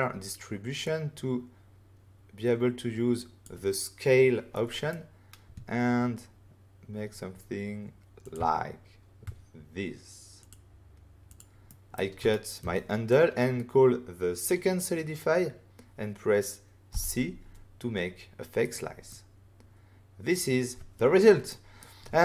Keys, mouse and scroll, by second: 0.8 click, 4.5 middle click, 8.2 click, 10.4 click, 11.2 click, 11.6 middle click, 12.2 ctrl+middle click, 12.6 middle click, 13.0 click, 16.8 c, 18.6 right click, 19.0 middle click, 21.4 middle click.